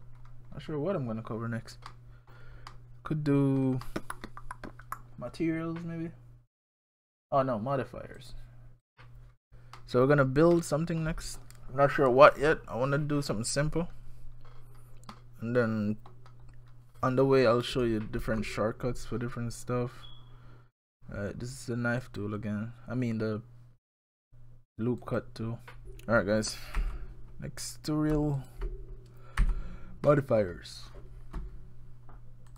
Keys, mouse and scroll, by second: 1.9 middle click, 2.7 middle click, 6.8 click, 8.2 click, 9.8 middle click, 10.6 middle click, 16.7-17.8 scroll down 1, 18.2 ctrl+r, 25.8 middle click, 25.8 shift+click, 25.8 scroll down 2, 26.8 f, 27.6 click, 28.4 shift+click, 29.4 f, 30.1 middle click.